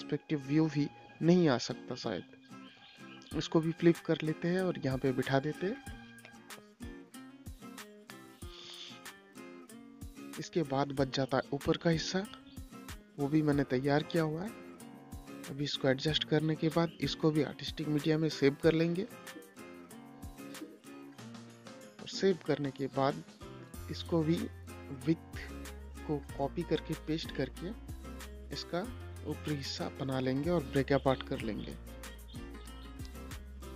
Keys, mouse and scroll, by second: 1.0 m, 2.5-6.7 drag, 7.7 ctrl+g, 8.6 shift+click, 9.7 c, 10.7 click, 12.8 shift+click, 13.9 ctrl+g, 14.6 click, 17.4 i, 18.4 click, 19.6 i, 20.1 Return, 20.9 click, 21.5 space, 23.9 click, 27.4 space, 27.9 click, 28.8 right click, 29.6 click.